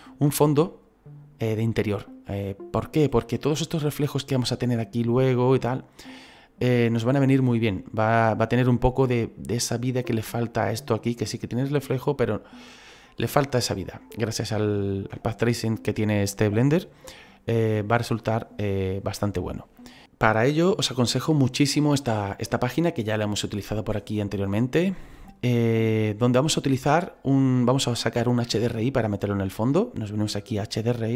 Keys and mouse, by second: 30.9 click.